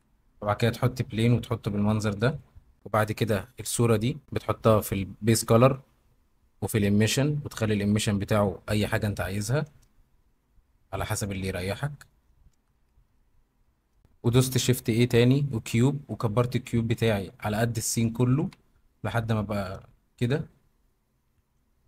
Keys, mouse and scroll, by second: 1.5 middle drag, 3.4 click, 8.4 click, 9.0-12.1 middle drag, 12.6 ctrl+z, 14.4 shift+a, 15.9 s, 18.4 x, 19.7 g, 19.8 z, 21.3 Escape.